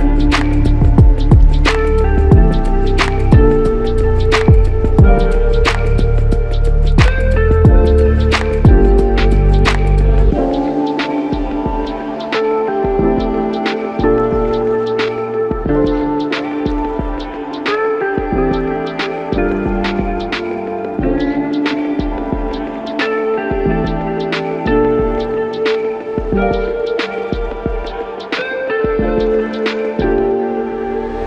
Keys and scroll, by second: 19.0 typing, 26.4 typing, 27.5-28.2 typing, 31.0-31.2 typing.